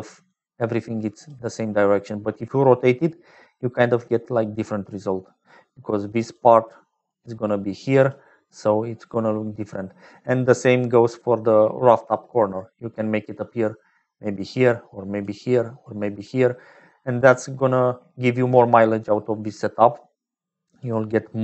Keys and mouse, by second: 1.0-4.7 drag, 2.9-3.7 d, 4.7-6.3 middle drag, 6.1-17.8 typing, 6.3 click, 7.0 middle click, 8.1-9.1 drag, 9.5 middle click, 10.4 click, 12.1-14.4 drag, 14.4 middle click, 15.8 click, 16.5-17.8 drag, 18.4 click, 19.1 click, 20.4 click.